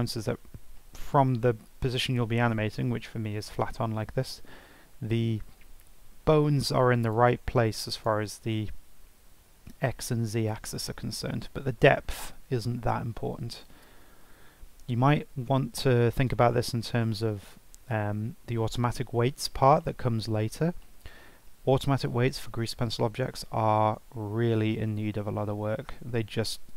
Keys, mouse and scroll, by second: 0.8 shift+middle drag, 1.1-1.6 scroll down 2, 1.6-2.1 scroll up 4, 2.1-2.6 scroll down 3, 2.6-5.2 shift+middle drag, 5.2-6.6 scroll up 1, 6.6-7.0 scroll up 1, 7.0 click, 7.4 Tab, 7.9 click, 8.8 g, 12.8-13.2 scroll down 4, 13.2 scroll up 3, 13.8 Tab, 14.2 scroll up 3, 14.7-15.1 scroll down 3, 15.8-16.2 scroll up 2, 16.2-16.5 scroll down 2, 16.5 shift+middle click, 16.9-17.2 scroll up 3, 19.0-19.5 scroll down 4, 19.5-19.8 scroll up 1, 19.8-24.0 shift+middle drag, 24.0-26.7 scroll down 1.